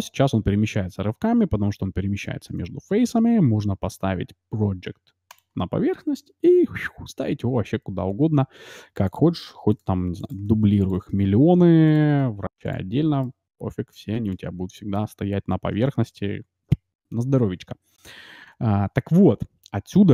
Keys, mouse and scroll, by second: 5.2-7.2 drag, 6.4 g, 9.8 shift+d, 10.5 shift+d, 11.1 shift+d, 12.3 shift+d, 13.2-15.2 middle drag.